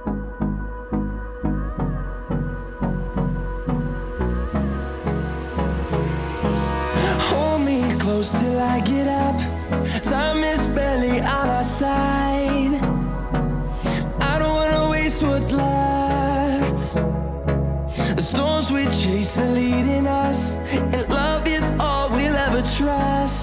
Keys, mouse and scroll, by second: 2.2 scroll down 1, 3.3-16.8 drag, 21.3 click, 23.3 click.